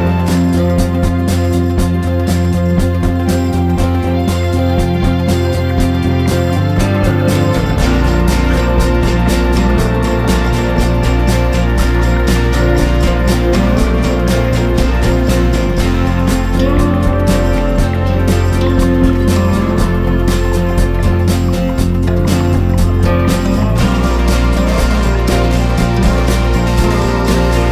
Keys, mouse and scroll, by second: 9.8 Delete, 10.4 click, 12.7 click, 17.7 F2, 19.7-24.4 drag, 24.7 ctrl+scroll, 26.4-27.7 drag.